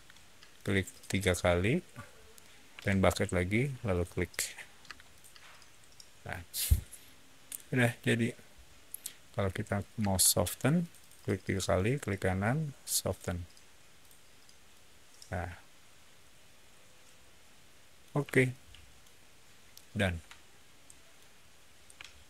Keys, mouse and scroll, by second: 0.4 click, 0.6 click, 0.8 click, 2.7 b, 3.8 click, 4.8 space, 5.0 click, 5.4 middle click, 10.7 click, 10.8 click, 10.9 middle click, 11.0 click, 11.5 right drag, 11.5-17.9 middle drag, 12.9 click, 13.9 click, 18.4 shift+middle click, 19.6-21.0 shift+middle drag.